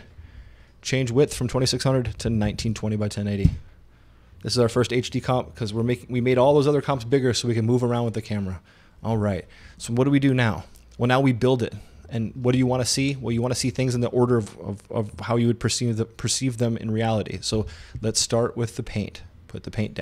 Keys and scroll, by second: 0.0-0.2 typing, 1.9-3.1 typing, 3.5 Return.